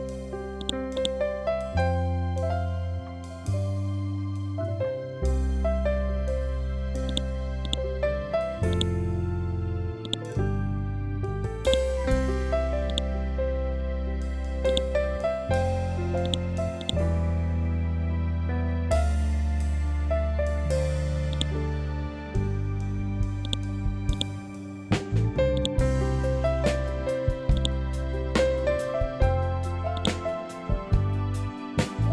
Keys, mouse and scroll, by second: 0.1 click, 1.1 Up, 6.5 click, 19.8-20.2 scroll down 1, 20.8 click, 21.5-21.8 scroll up 1, 22.9-32.1 drag.